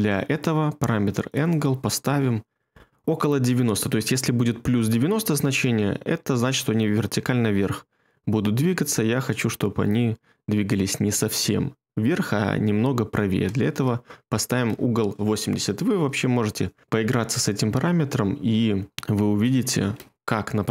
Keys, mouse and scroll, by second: 13.1-13.9 typing, 14.6 Return.